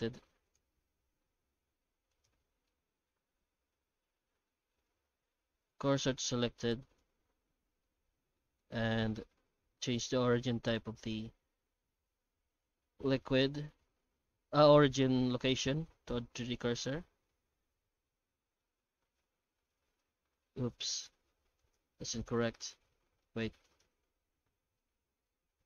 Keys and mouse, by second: 0.0 Tab, 0.6 shift+z, 0.8 middle click, 1.8 1, 2.1 right click, 2.6 middle click, 3.7 shift+s, 7.6 Tab, 7.8 alt+middle click, 8.5 alt+middle click, 8.8 middle click, 9.2 middle click, 10.4 w, 17.4 r, 22.5-23.2 shift+middle drag, 23.6 right click, 25.2 shift+s.